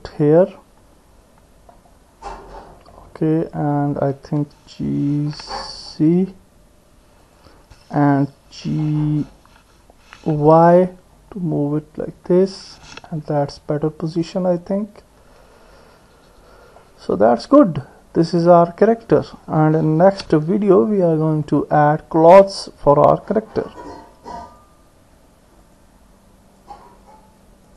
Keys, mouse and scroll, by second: 0.5-1.7 middle drag, 2.9-4.0 middle drag, 5.2 g, 9.0 g, 13.3-16.8 middle drag, 17.3 middle click, 20.1 ctrl+s, 21.5 middle click.